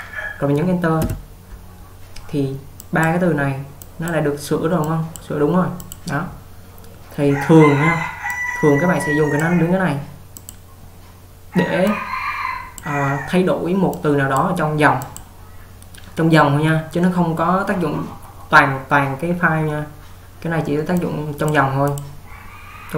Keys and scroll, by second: 1.1 Return, 3.8 typing.